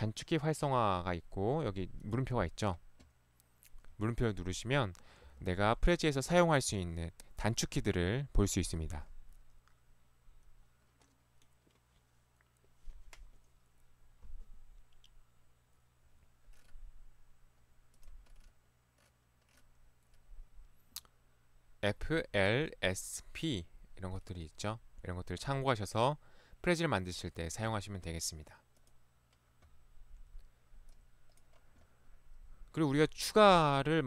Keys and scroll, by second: 33.5 ctrl+1.